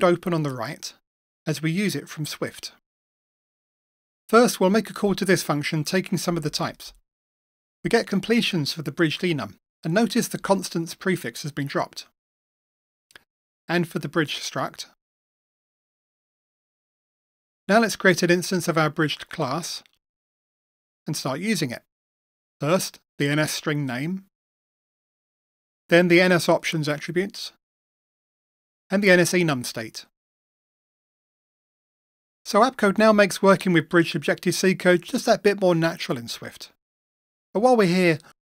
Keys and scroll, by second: 1.0 Right, 7.4 Return, 9.5 Return, 10.7 super+z, 16.1 Return, 20.5 Return, 24.9 Return, 26.8 Return, 28.2 Return, 31.5 Return.